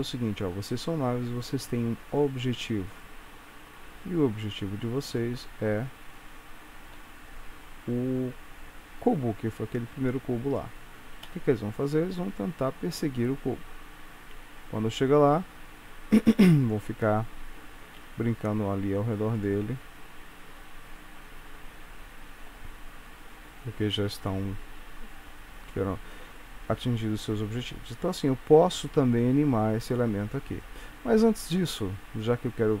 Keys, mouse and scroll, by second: 5.2 click, 7.4 click, 9.7-10.4 scroll down 3, 11.2 space, 17.9 space, 19.5 click, 19.8 space, 26.8 space, 27.5 scroll down 3, 29.9 click, 31.5 click, 32.1-32.8 scroll up 5.